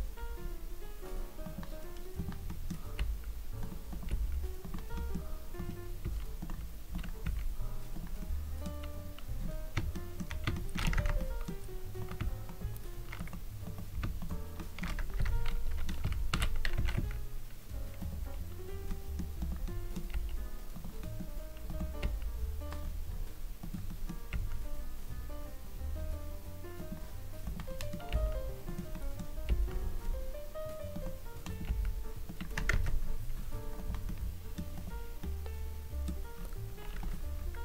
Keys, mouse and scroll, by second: 0.4 scroll down 2, 1.4 click, 1.4 scroll down 2, 2.1 click, 2.5 middle click, 3.0 g, 3.6 click, 3.9 click, 4.2 g, 4.6 click, 4.9 middle click, 5.6 click, 6.1 s, 6.4 click, 6.9 click, 7.3 r, 8.0 click, 8.2 middle click, 9.0-9.9 scroll down 3, 9.9 shift+middle click, 10.5 shift+middle click, 11.0 Tab, 11.2 middle click, 12.0 click, 12.4 shift+click, 13.1 click, 13.6 click, 14.2 shift+click, 14.6 shift+middle click, 14.8-15.2 scroll up 2, 15.2 Tab, 15.5 middle click, 16.0 a, 16.4 s, 16.8 z, 17.0 z, 18.0 click, 18.9 middle click, 19.4 click, 19.7 middle click, 20.2 g, 20.8 click, 21.0 middle click, 21.7 click, 22.0 g, 22.8-23.6 scroll up 5, 23.6 click, 23.9 middle click, 24.4 r, 25.0-25.3 scroll down 2, 26.8 click, 26.8 scroll down 5, 27.4 click, 27.7 middle click, 28.2 g, 28.6 click, 28.9 middle click, 29.5 g, 29.7-30.5 scroll up 5, 31.0 click, 31.4 click, 31.7 g, 32.2 click, 32.8 Tab, 33.0 scroll down 2, 33.8 click, 33.8 scroll down 2, 34.0 middle click, 34.7 click, 35.2 middle click, 36.3-37.0 scroll up 2, 37.0 click, 37.4-37.6 scroll up 2.